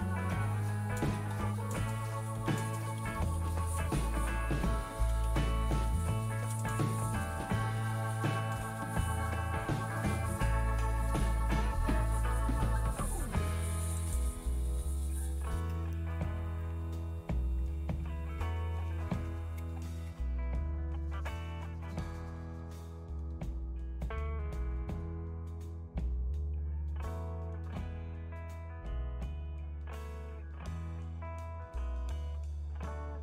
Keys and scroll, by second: 0.0-6.5 typing, 4.0 Return, 4.1 Return.